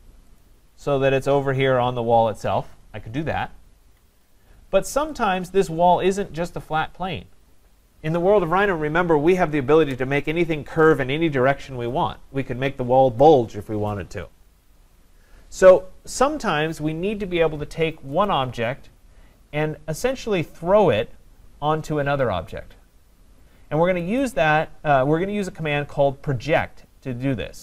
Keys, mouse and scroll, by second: 0.4 click, 3.1 typing, 4.1 Escape, 4.9 Escape, 18.3 click, 24.2 click.